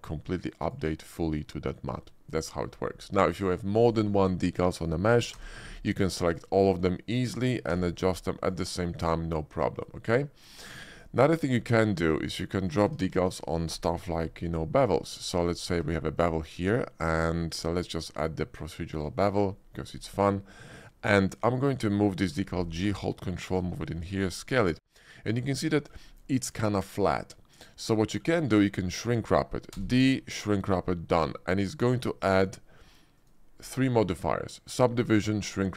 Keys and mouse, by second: 4.2-5.3 drag, 5.3 d, 7.7 d, 9.7 click, 11.3 shift+middle click, 11.9 shift+middle click, 12.2 middle drag, 12.8 Tab, 13.2 click, 14.2 ctrl+b, 15.7 Tab, 16.1-17.2 drag, 17.5 middle click, 18.6 click, 19.1 shift+middle drag, 19.6 middle click, 20.1 shift+middle click, 21.3 click, 22.2 g, 24.2 s, 25.0 click, 25.5 middle click, 25.7 shift+middle click, 26.2 middle click, 27.3 middle click, 28.0 shift+middle click, 28.4 middle click, 29.7 d, 32.3 click, 33.1 click.